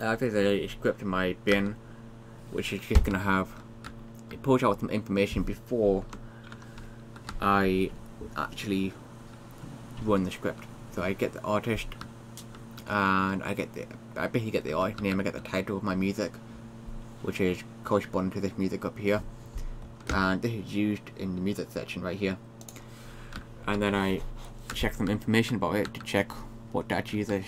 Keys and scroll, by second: 0.0-0.3 typing, 1.3-2.1 typing, 3.2 Down, 3.4-4.6 typing, 6.5 Up.